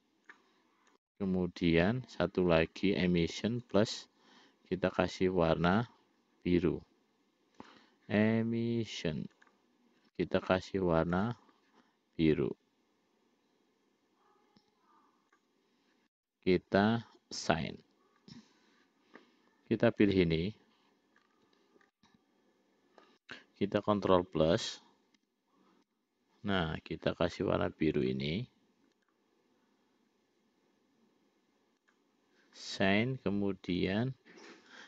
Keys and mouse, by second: 1.7 click, 4.1 click, 5.3-6.5 drag, 8.0-10.5 drag, 11.5 click, 20.4 click, 22.4-23.6 middle drag, 25.6 ctrl+KP_Add, 26.3 ctrl+KP_Add, 28.4-31.2 drag, 32.2 click, 34.2 click.